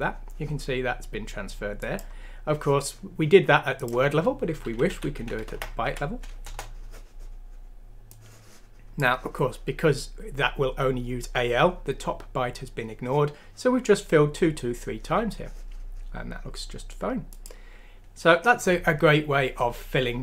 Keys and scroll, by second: 4.9 ;, 5.1 Down, 5.8 F6, 6.4 Return.